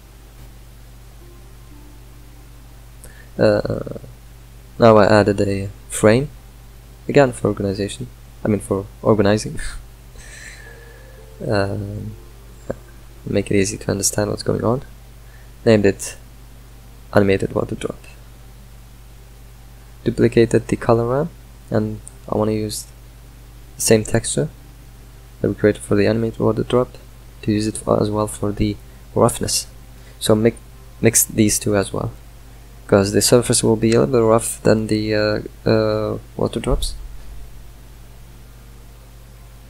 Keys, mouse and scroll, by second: 16.4 click, 17.6 shift+d, 22.3 click, 26.5 click, 27.1 click, 27.7 shift+d, 29.9 click, 32.1-39.6 drag.